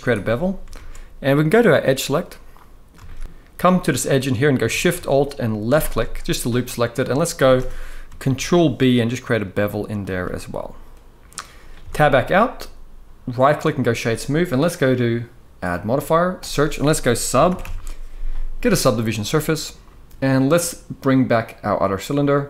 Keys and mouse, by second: 0.4 alt+a, 2.2-2.6 middle drag, 2.8 shift+middle drag, 6.8 middle click, 7.2 shift+middle drag, 8.0 ctrl+b, 10.0-11.0 middle drag, 11.5 Tab, 13.1-13.6 right drag, 15.5-19.0 drag, 21.4 click.